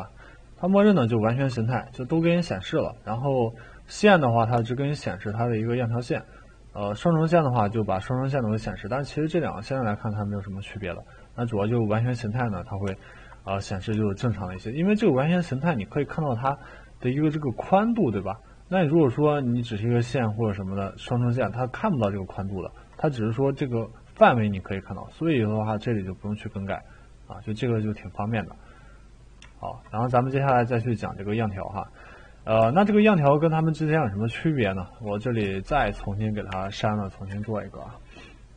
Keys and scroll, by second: 36.5 Delete, 37.3 Delete.